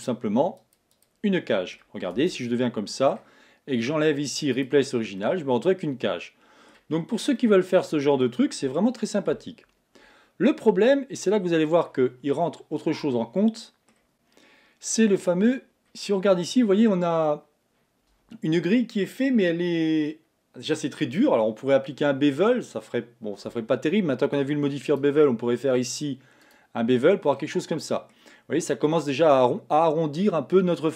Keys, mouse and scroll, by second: 1.4 middle click, 2.2 Tab, 2.6-4.6 middle drag, 4.6 click, 5.3-7.0 middle drag, 7.0-7.4 scroll down 3, 7.4-11.8 middle drag, 13.1-15.5 middle drag, 15.5-16.0 scroll up 4, 16.5-18.9 scroll up 1, 25.0-27.4 drag, 27.4-28.5 middle drag, 28.5-29.6 scroll up 1.